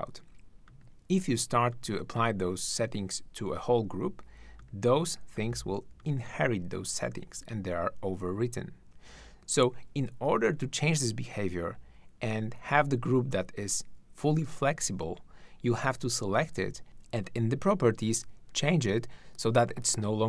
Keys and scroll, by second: 16.8 shift+`.